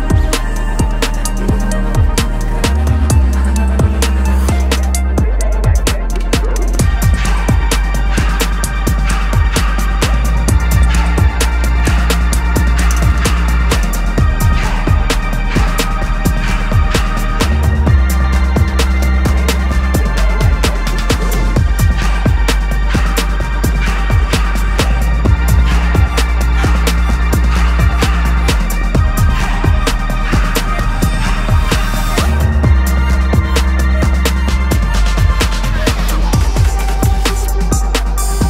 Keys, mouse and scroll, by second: 0.5 middle click, 1.5 scroll, 7.4-11.6 drag, 11.9 x, 13.0 n, 15.8-17.0 drag, 17.0 n, 34.5-35.9 drag, 36.2 click.